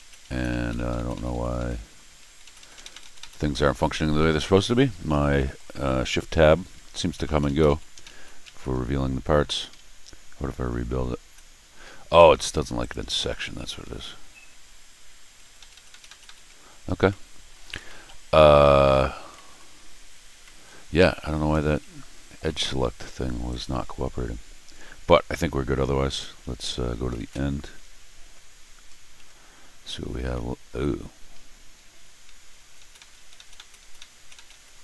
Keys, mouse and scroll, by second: 0.3 shift+Tab, 0.5 shift+Tab, 1.0 shift+Tab, 1.1 shift+Tab, 1.3 shift+Tab, 1.6 middle click, 2.3 shift+Tab, 2.4 shift+Tab, 2.6 shift+Tab, 2.7 shift+Tab, 2.9 shift+Tab, 3.0 shift+Tab, 4.5 middle click, 5.3 middle click, 6.8 shift+Tab, 7.2 shift+Tab, 7.4 shift+Tab, 7.6 shift+Tab, 8.0 shift+Tab, 9.5 r, 11.2 shift+Tab, 12.8 click, 13.8 shift+Tab, 15.2 shift+Tab, 15.4 shift+Tab, 15.6 shift+Tab, 15.7 shift+Tab, 15.9 shift+Tab, 16.0 shift+Tab, 16.2 shift+Tab, 17.1 middle click, 17.7 scroll down 1, 18.0 middle click, 18.5 scroll down 1, 18.6 middle click, 19.3 middle click, 20.1 scroll up 1, 20.4 middle click, 20.9 scroll up 1, 21.6 scroll down 1, 22.2 scroll up 2, 22.4-22.9 scroll down 4, 23.5 click, 27.1 ctrl+alt+shift+r, 28.9 middle click, 29.2 middle click, 30.3 middle click, 30.7 scroll up 2, 31.9 shift+Tab, 32.6 shift+Tab, 32.8 shift+Tab, 33.0 shift+Tab, 33.5 Tab, 33.8 Tab, 34.0 Tab, 34.3 Tab.